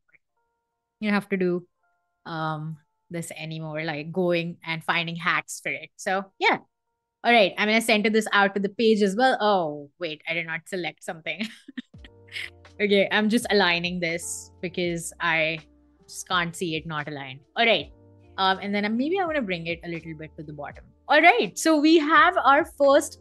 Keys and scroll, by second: 0.4 super+z, 3.8 super+g, 9.0 super+z, 13.7 super+g.